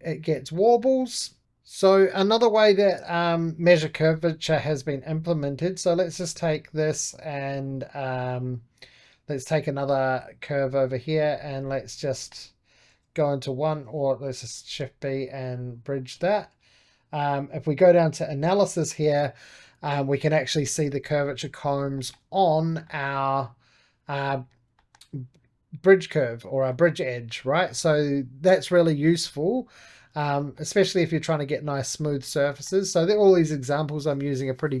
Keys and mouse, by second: 0.8 shift+click, 1.5-6.2 drag, 6.2-8.6 right drag, 9.2-12.0 drag, 12.0 2, 12.8 1, 14.2 shift+b, 14.9-20.7 drag, 21.1-29.1 shift+middle drag, 30.3-34.8 shift+middle drag.